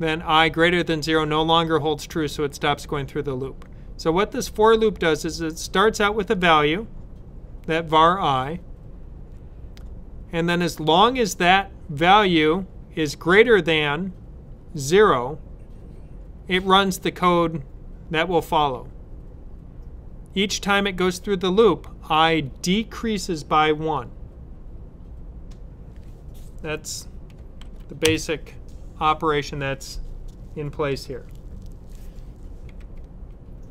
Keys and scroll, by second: 27.5 shift+[.